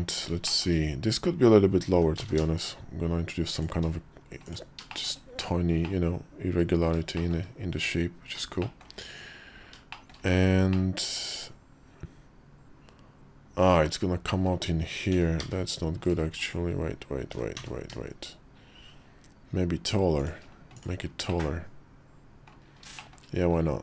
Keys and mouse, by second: 0.2 shift+middle click, 1.7 g, 4.2 click, 4.7 shift+middle click, 5.6-6.6 middle drag, 6.9 shift+middle click, 8.4 shift+middle click, 9.7 shift+middle click, 10.5-14.2 middle drag, 14.9 g, 15.2 z, 16.2 click, 17.0 g, 20.5 click, 21.0-22.3 middle drag, 22.7 shift+middle click.